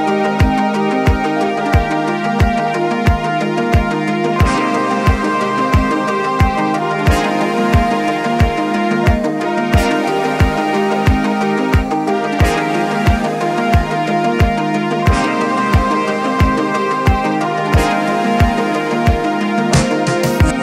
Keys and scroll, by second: 2.0 Escape, 14.6 t, 20.4-20.6 typing.